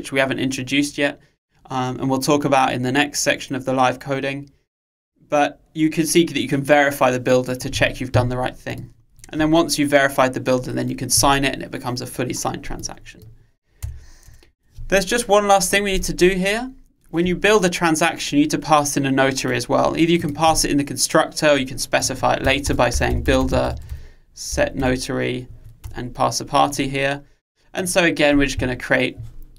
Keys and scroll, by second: 26.0 Return.